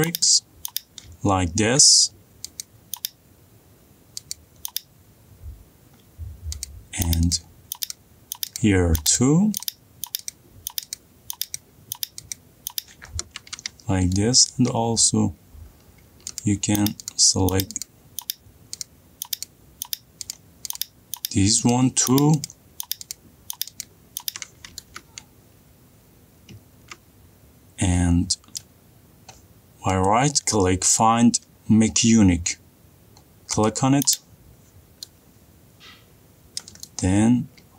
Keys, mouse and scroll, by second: 5.8-13.8 ctrl+drag, 14.2 middle click, 14.5 middle click, 14.9 middle click, 15.5 middle click, 15.6 middle click, 16.9 ctrl+click, 21.2 scroll, 24.9 scroll down 4, 29.1 middle click, 29.8-30.3 scroll up 3, 30.3 middle click, 30.5 scroll, 30.5 right click, 34.9 click, 35.2 middle click, 37.1 middle click.